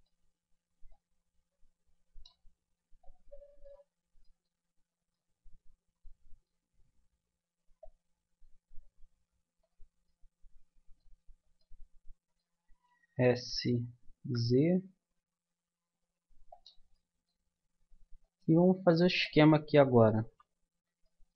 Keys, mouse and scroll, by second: 0.0 click, 0.9-2.6 drag, 3.0-5.3 middle drag, 7.8-9.6 middle drag, 10.1 middle click, 10.9 middle click, 11.2-14.2 middle drag, 13.1 s, 16.9-18.9 middle drag, 19.5-21.3 middle drag.